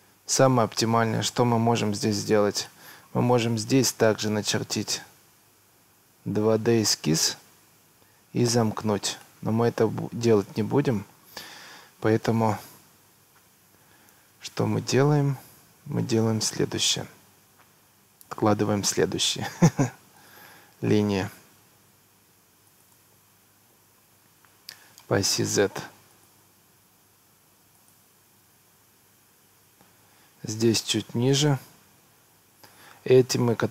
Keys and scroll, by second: 26.5 Escape.